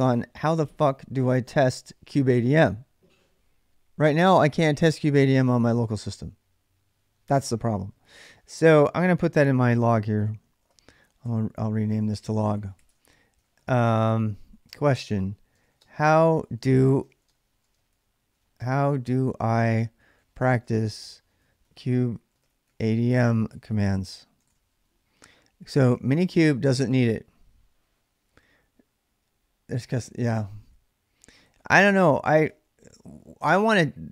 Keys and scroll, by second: 8.5 ctrl+a, 9.1 1, 10.0 ctrl+a, 11.0-24.2 typing, 25.4-26.4 typing, 31.0-32.7 typing.